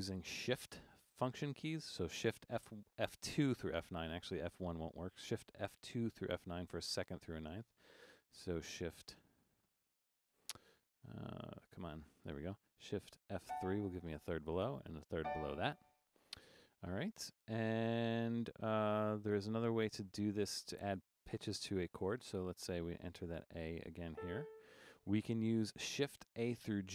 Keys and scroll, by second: 13.5 shift+F3, 22.4 Down, 22.6 Down, 22.7 Down, 22.9 Down, 23.0 Down, 23.3 Down, 24.1 a.